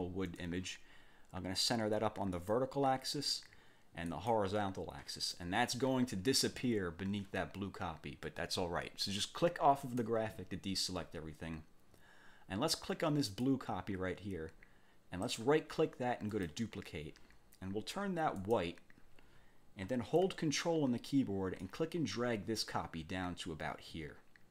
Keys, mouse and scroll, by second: 2.3 click, 4.1 click, 5.3 click, 9.8 click, 13.3 click, 15.3 click, 16.3 click, 18.4 click, 21.6-24.5 ctrl+drag.